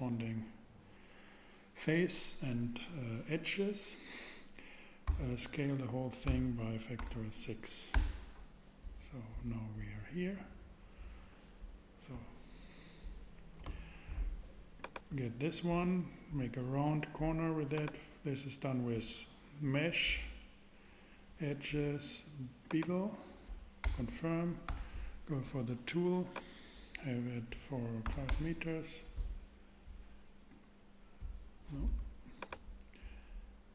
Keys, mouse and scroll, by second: 5.1 a, 6.2 s, 7.0 6, 7.9 Return, 23.8 Return, 24.7 t, 28.0 5, 28.3 Return, 30.8 click.